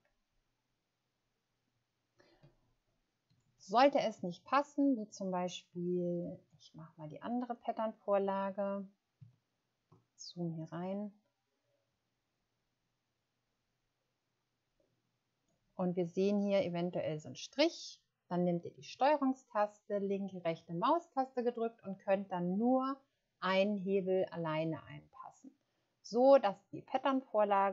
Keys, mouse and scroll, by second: 3.1 shift+scroll down 1, 7.4 click, 9.5 ctrl+scroll up 1, 11.1 ctrl+scroll up 1, 19.8 ctrl+click, 20.2 ctrl+right click.